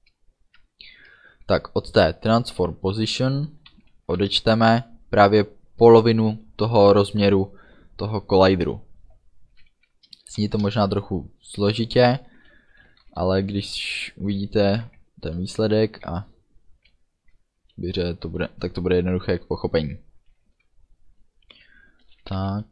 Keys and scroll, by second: 1.2 KP_Subtract, 3.9 =, 4.2 space, 10.4 shift+9, 12.9 b, 22.1 b, 22.3 o.